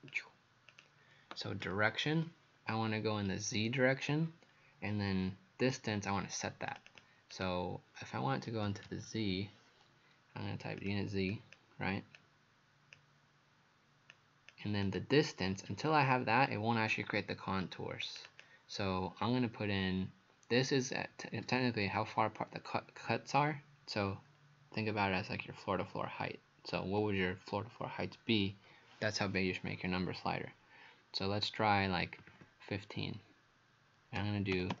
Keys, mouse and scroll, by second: 0.7 click, 6.9 click, 8.4-9.6 typing, 10.8 click, 11.3 click, 12.2 click, 18.3 click, 32.3 KP_1, 32.3 KP_5, 34.2 KP_Decimal, 34.6 KP_0, 34.7 KP_0.